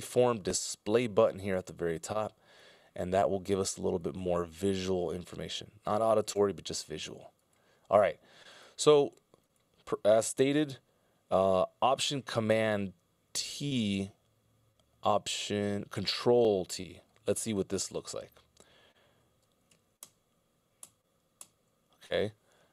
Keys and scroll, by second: 20.5 ctrl+alt+Right, 21.1 ctrl+alt+Right, 21.6 ctrl+alt+Right.